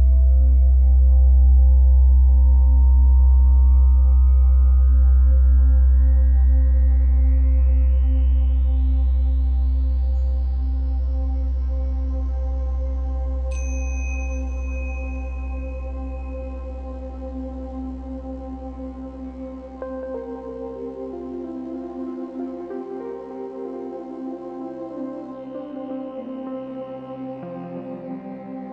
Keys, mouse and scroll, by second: 0.9 scroll down 1, 1.1-3.4 shift+middle drag, 1.5 scroll up 1, 3.4-5.2 drag, 5.2-7.0 middle drag, 6.0-7.0 scroll up 2, 7.0-10.0 drag, 9.7 scroll down 2, 10.0-11.7 middle drag, 10.5 scroll up 2, 11.7-12.9 drag, 12.7 scroll down 2, 12.9-14.6 middle drag, 13.6-14.6 scroll up 2, 14.6-17.0 drag, 16.7 scroll down 1, 17.0-28.7 middle drag, 17.8 KP_1, 18.9-19.3 scroll up 2, 20.2 z, 20.3 scroll up 1, 21.9-22.8 scroll down 2, 23.0-23.6 scroll up 2, 23.6-24.0 scroll up 1, 24.0-25.7 scroll down 4, 25.4 z, 26.1-26.6 scroll up 2.